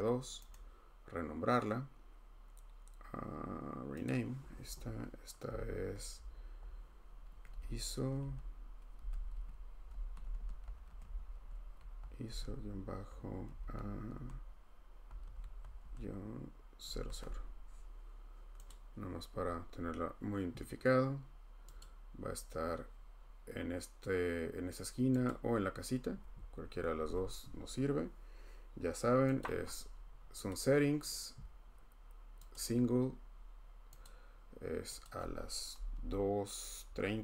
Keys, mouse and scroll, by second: 0.5 middle click, 4.1 click, 7.1-15.8 typing, 18.8 click, 18.8 0, 21.8 click, 25.3 click, 29.4 click, 30.5 click, 32.5 click, 34.0 click, 35.0 click, 35.9 2.